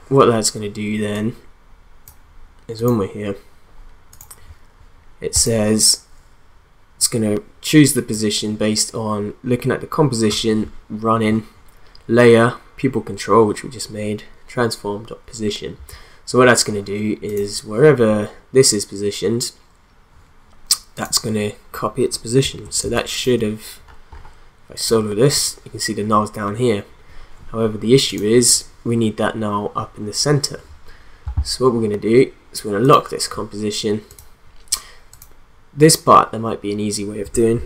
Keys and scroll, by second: 22.8 space.